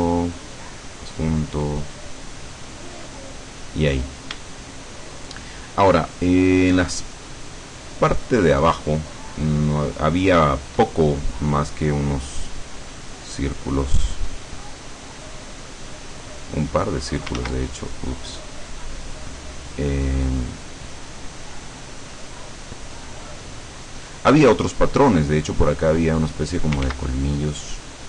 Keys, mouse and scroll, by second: 0.5 click, 1.8-2.9 drag, 3.1 click, 5.3-8.5 shift+middle drag, 13.5-15.3 drag, 15.8-17.1 drag, 17.5 ctrl+z, 18.1-19.1 ctrl+drag, 20.8-22.7 drag, 23.3 click, 25.9 click, 27.0 ctrl+z, 27.5-28.0 ctrl+drag.